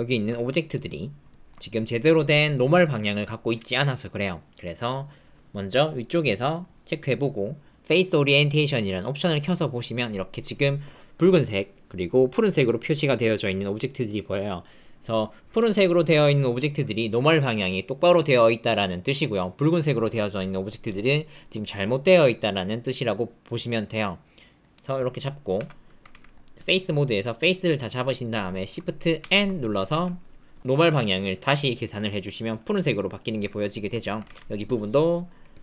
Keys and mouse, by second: 1.3 shift+click, 5.0 middle click, 6.4-10.3 drag, 20.1 click, 25.5 Tab, 26.1 alt+z, 26.6 click, 29.2 shift+n, 29.9 alt+z, 32.1 click, 32.9 click, 33.4 Tab, 34.2 alt+z, 34.7 click.